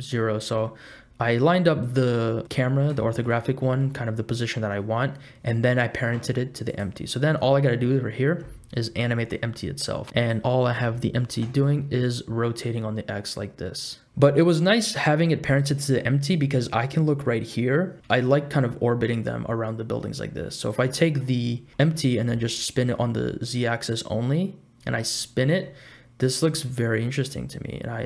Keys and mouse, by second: 1.3-2.4 middle drag, 2.5 middle click, 3.2 shift+middle click, 3.5 middle click, 6.7 click, 10.1 r, 10.4 r, 15.5 click, 18.2 r, 20.9 click, 21.1 middle click, 21.7 r, 24.9 r.